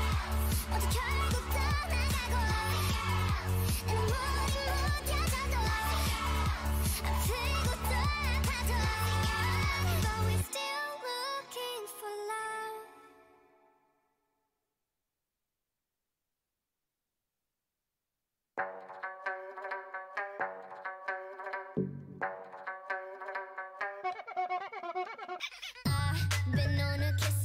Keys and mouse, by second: 3.4 KP_1, 5.9-7.8 drag, 7.1 o, 10.5-14.5 typing, 16.3-21.9 drag, 18.6 f, 20.3 f, 20.3 a, 22.9 ctrl+Tab, 23.6-25.5 drag, 23.9 x, 25.6 ctrl+Tab, 26.5-27.4 drag, 26.7 g.